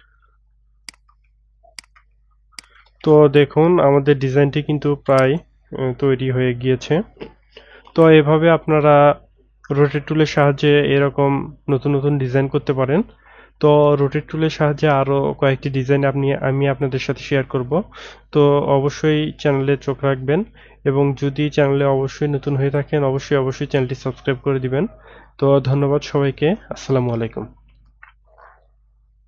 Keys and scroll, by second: 1.1 BackSpace, 27.8 ctrl+F11.